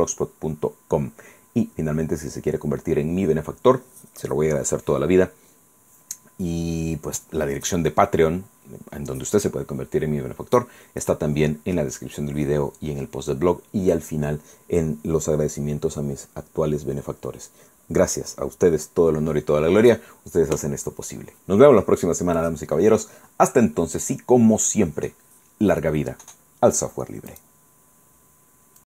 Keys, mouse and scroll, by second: 27.4 click, 28.8 click.